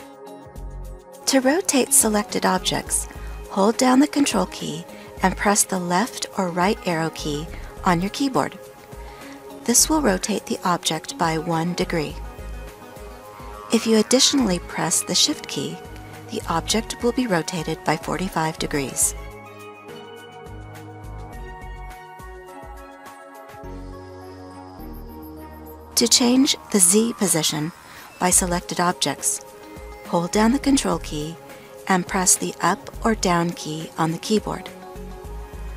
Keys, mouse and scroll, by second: 3.2 ctrl+Right, 5.6 ctrl+Left, 13.6 ctrl+shift+Left, 19.3 ctrl+Left, 21.9 ctrl+Right, 32.0 ctrl+Up.